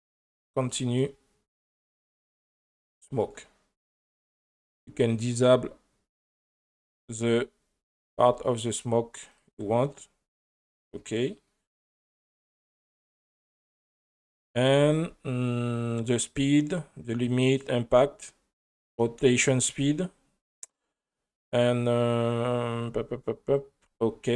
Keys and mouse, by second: 5.2 click, 7.1 click, 8.0 click, 9.3 click, 9.9 click, 10.6 click, 12.4-13.2 drag, 13.7 click, 14.7 space.